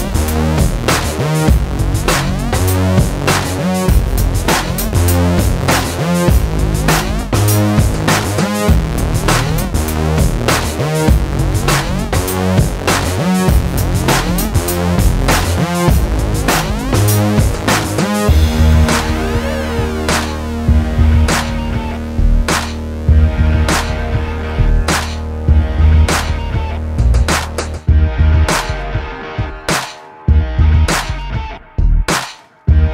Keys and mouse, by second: 0.0 middle click, 1.2 click, 2.0 s, 3.8 middle click, 4.1 Tab, 4.4 Tab, 4.8 Tab, 5.4 middle click, 5.8 middle click, 6.4 Tab, 6.9 middle click, 7.6 alt+s, 8.2 Tab, 8.4 Tab, 9.0 Tab, 9.3 Tab, 10.3 alt+s, 11.0 Tab, 12.1 alt+s, 12.9 Tab, 13.6 ctrl+s, 14.2 middle click, 14.4 Tab, 16.8 middle click, 18.2 ctrl+b, 19.1 ctrl+b, 19.9 ctrl+KP_Subtract, 20.3 alt+s, 21.1 middle click, 21.4 click, 21.7 middle click, 22.3 alt+m, 23.6 ctrl+z, 23.7 ctrl+z, 23.8 ctrl+z, 24.6-25.6 middle drag, 25.6 click, 26.6 middle click, 27.2 click, 27.7 a, 28.2 alt+s, 28.7 middle click, 29.1 alt+s, 29.7 middle click, 29.9 KP_7, 31.1 ctrl+z, 31.5 middle click, 32.0 KP_7, 32.4 s.